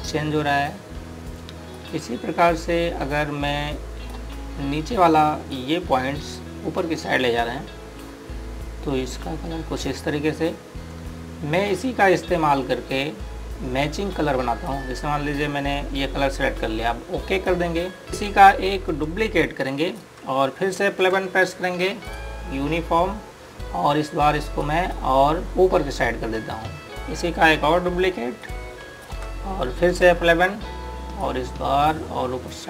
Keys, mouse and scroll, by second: 18.1 click, 21.8 F11, 22.8 click, 25.4 click, 29.2 ctrl+right click, 30.7 F11, 30.9 click.